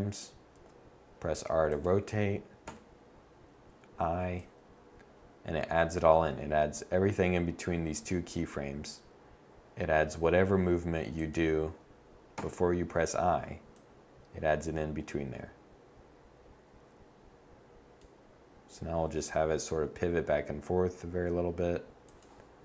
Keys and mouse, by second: 0.2 r, 2.4 i, 7.6 r, 12.1 i, 19.5 r, 21.8 click, 22.5 i.